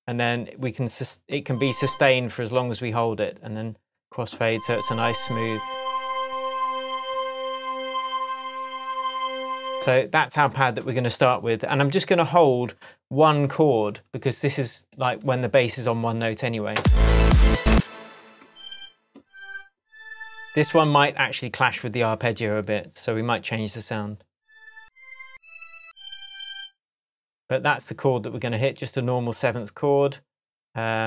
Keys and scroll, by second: 16.7 space.